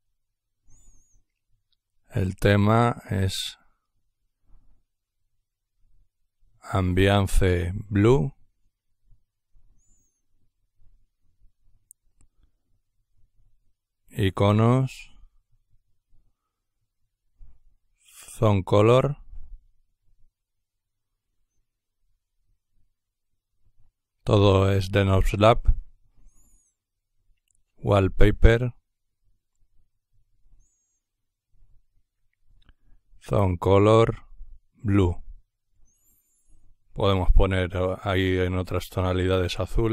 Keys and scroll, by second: 0.0-9.6 typing, 12.0-14.2 typing, 15.4-21.1 typing, 25.6-35.6 typing.